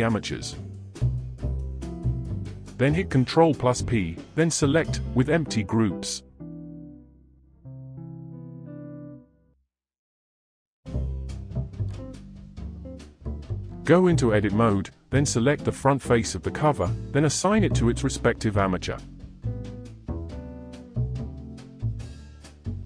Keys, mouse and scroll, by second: 0.6 click, 1.7 shift+click, 2.9 ctrl+p, 6.7 click, 7.2-7.8 middle drag, 7.8 click, 8.4-11.4 middle drag, 12.1 click, 13.0 KP_1, 14.3 Tab, 14.9 click, 15.6-18.5 middle drag, 18.5 click, 20.2-21.3 drag, 21.3 middle click, 22.2 click.